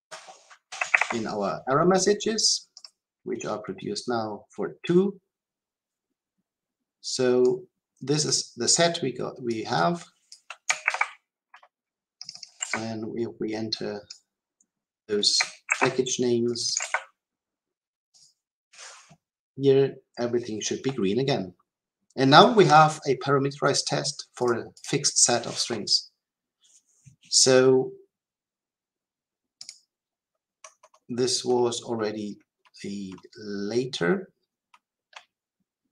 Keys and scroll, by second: 2.8 ctrl+s, 10.8 ctrl+c, 18.1 shift+F10.